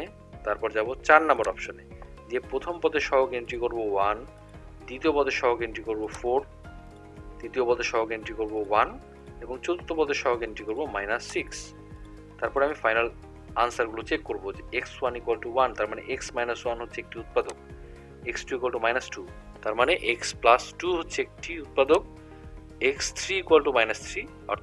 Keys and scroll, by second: 1.4 4, 3.6 1, 4.5 =, 6.2 4, 7.0 =, 8.8 1, 9.2 =, 10.8 -, 11.4 6, 12.1 =, 12.5 =, 17.5 Down, 22.0 Down.